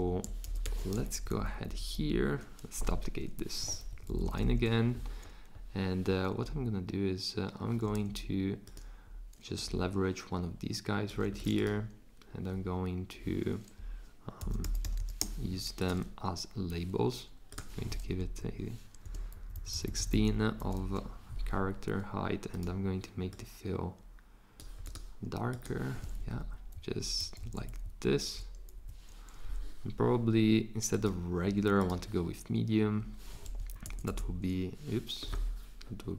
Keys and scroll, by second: 0.4 super+c, 0.6 super+v, 1.1 shift+Down, 1.3 shift+Down, 1.4 shift+Down, 1.9 shift+Down, 3.9 Down, 4.0 Down, 4.2 Down, 4.4 Down, 14.1-15.7 typing, 18.2 Up, 19.1 Return, 19.4 Down, 19.6 Down, 19.7 Down, 19.9 Down, 20.1 Down, 20.3 Down, 20.6 Up, 26.2 Down, 26.7 Up, 27.2 Left, 27.4 Left, 27.8 Up, 28.7 Down, 33.6 Up, 33.8 Left, 34.1 Left.